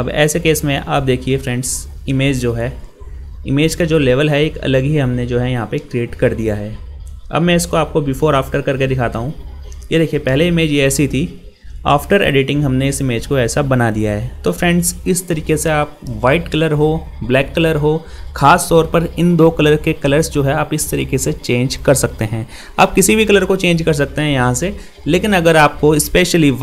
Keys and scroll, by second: 2.8 ctrl++, 5.7 ctrl+0, 8.6 ctrl+g.